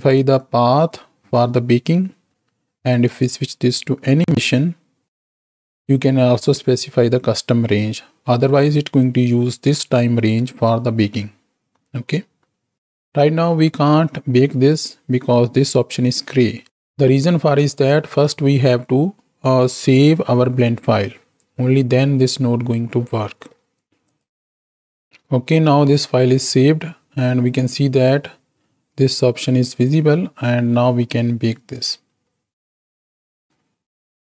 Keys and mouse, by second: 4.7 click, 24.1-24.5 drag, 32.0-34.2 drag.